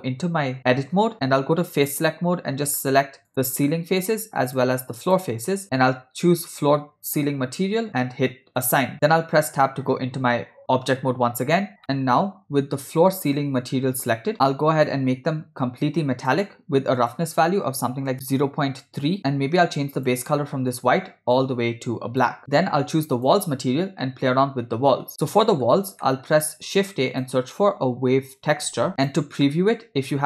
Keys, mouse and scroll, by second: 1.7 click, 2.7 click, 3.7 middle click, 4.5 shift+click, 5.1 shift+click, 6.5 click, 8.6 click, 8.9 Tab, 13.3 click, 14.9-16.4 drag, 17.0-19.2 drag, 18.1 BackSpace, 20.0 click, 23.2 click, 25.1 middle click, 26.1 middle click, 26.7 shift+a, 29.5 middle click.